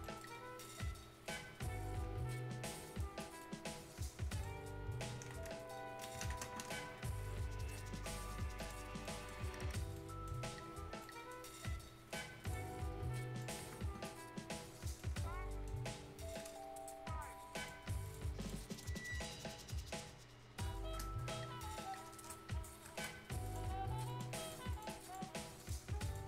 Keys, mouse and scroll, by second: 0.0 right click, 0.2 scroll down 1, 0.4 scroll up 1, 0.6-3.2 right drag, 3.2 scroll up 1, 3.4-5.1 right drag, 5.1 scroll down 1, 5.3 ctrl+space, 5.6 Tab, 5.9 scroll up 1, 6.0 right click, 6.2 ctrl+space, 8.5 click, 8.8 scroll up 1, 9.0 right click, 9.5 Tab, 9.9 right click, 10.6 scroll down 1, 11.0 right click, 11.4 scroll down 1, 12.4 click, 12.8 Tab, 13.4 click, 13.6 Tab, 14.0 scroll down 1, 14.3 scroll up 1, 14.9 right click, 15.9 2, 16.1 scroll up 1, 16.3 right click, 16.5 scroll down 1, 16.7-17.3 scroll up 1, 17.5 click, 19.0 shift+scroll down 1, 19.2 shift+scroll up 1, 21.1 scroll down 1, 21.4 scroll up 1, 23.4 click.